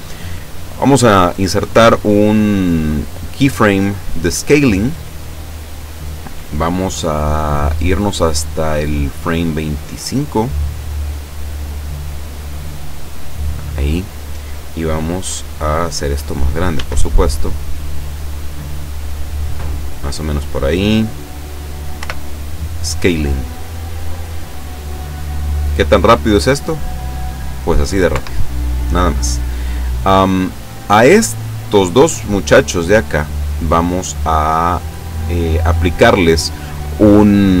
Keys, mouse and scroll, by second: 1.7 i, 4.7 click, 9.1-13.7 drag, 16.7 s, 19.6 click, 22.0 i, 22.7 click, 25.1 click, 26.4 click, 28.1 Escape, 30.7 right click, 32.8 right click, 34.1 right click.